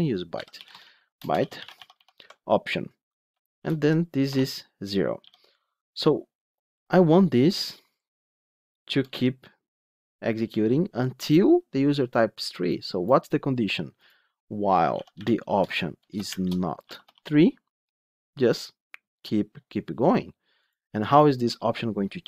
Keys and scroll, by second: 15.5 Return.